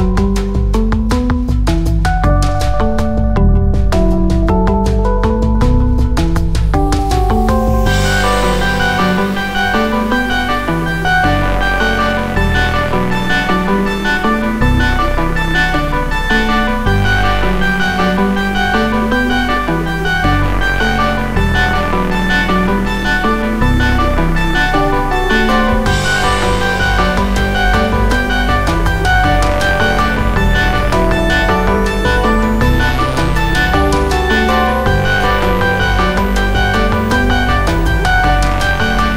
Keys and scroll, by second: 0.2 shift+g, 2.8 x, 11.7 a, 13.2 i, 22.0 ., 22.0 4, 22.6 m, 22.7 m, 23.8 Tab, 26.1-28.4 typing, 28.9 Tab, 35.1 Tab.